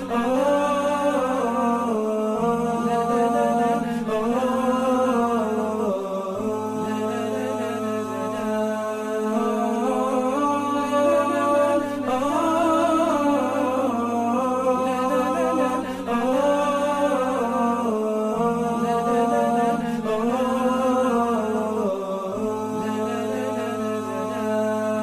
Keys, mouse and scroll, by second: 5.5 double click, 8.3-8.7 alt+scroll down 1, 20.7-21.8 typing.